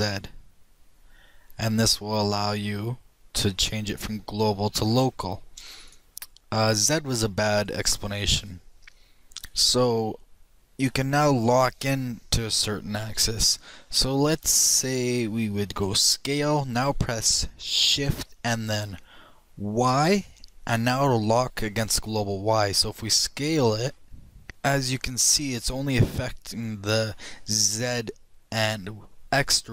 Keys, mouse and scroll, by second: 16.2 s.